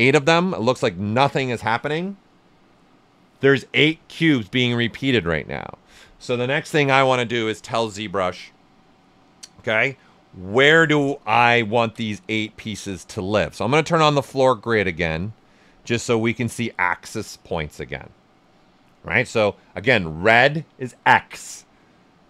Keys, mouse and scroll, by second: 0.6-11.4 right drag, 11.6 ctrl+right click, 12.4 alt+right click, 15.1 click, 15.6-22.2 ctrl+right drag, 21.8 typing.